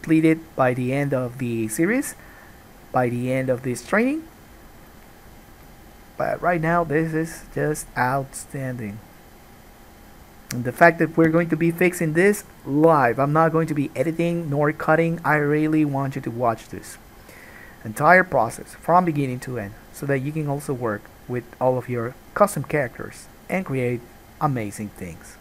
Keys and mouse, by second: 7.8-25.4 drag.